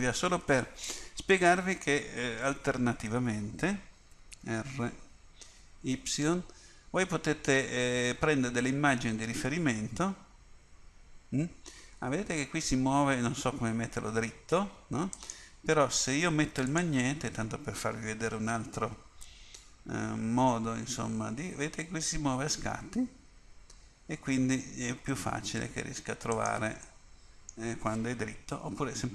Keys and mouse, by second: 4.2 r, 16.8-19.0 drag, 19.0 r, 27.0 middle click.